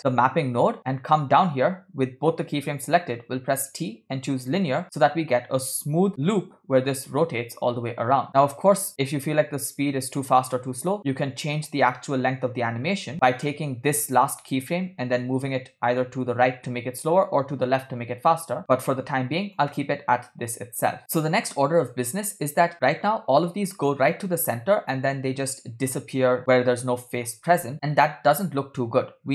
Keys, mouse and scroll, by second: 0.0 middle click, 0.0 scroll down 2, 3.4 t, 5.9 click, 6.1 space, 8.3 click, 10.5 scroll down 3, 11.0 space, 11.9 g, 13.4 click, 14.1 click, 15.0 g, 20.7 space, 21.0 middle click, 21.0 scroll up 3, 21.7 space, 22.2 space, 24.7 space, 25.1 space, 26.5 space.